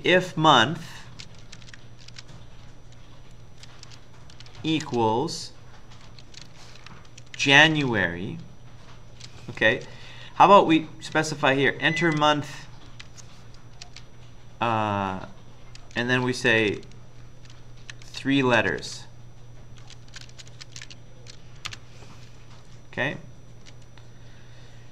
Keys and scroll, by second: 0.9-2.6 typing, 3.9-4.9 typing, 6.2-8.2 typing, 9.5-10.3 typing, 10.5 Up, 11.2 Right, 11.8 Right, 11.8 Right, 12.9 Right, 13.6-14.4 typing, 16.5 typing, 17.6-24.1 typing.